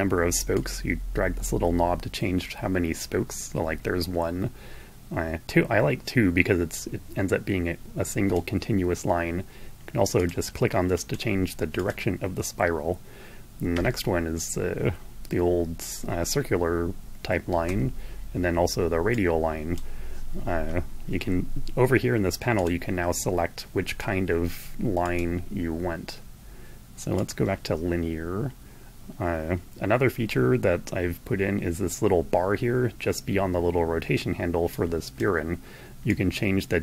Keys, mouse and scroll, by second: 9.5 click, 10.8 click, 11.6 click, 13.5 Right, 16.8 Right, 18.9 click, 22.3 click, 23.5 click, 24.8 click, 26.9 click, 34.3 click, 35.8-36.8 drag.